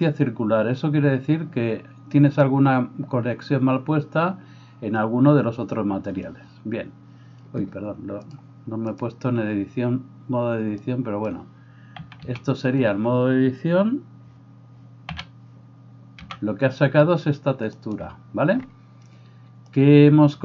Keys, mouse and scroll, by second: 12.0 a, 12.3 a, 15.1 a, 16.3 g, 16.9-18.1 middle drag.